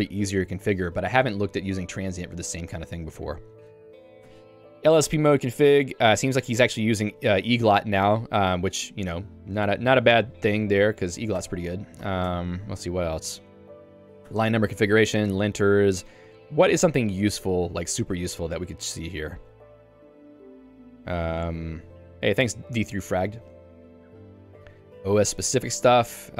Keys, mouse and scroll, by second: 0.4 k, 0.8 j, 4.3 Tab, 6.3 ctrl+d, 7.0 ctrl+u, 8.0 k, 8.4 j, 11.4 Tab, 12.0 j, 12.5 Tab, 14.3 Tab, 14.7 j, 19.0 k, 24.2 j, 25.3 Tab.